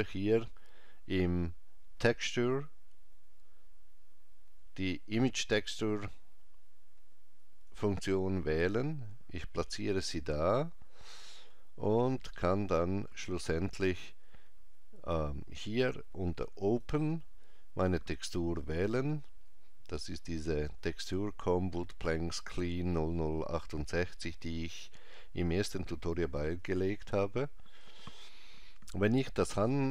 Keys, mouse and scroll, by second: 10.7-11.3 scroll up 2, 11.3-12.3 scroll up 1, 12.3 middle click, 12.3-14.0 scroll up 1, 16.7 click, 26.8 click.